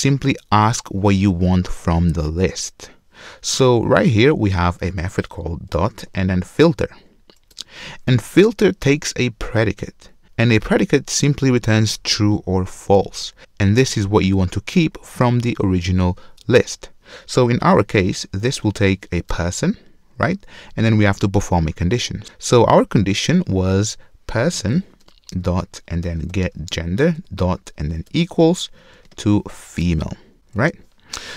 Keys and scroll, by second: 7.6 Return, 19.2 Return, 29.1 ctrl+shift+space.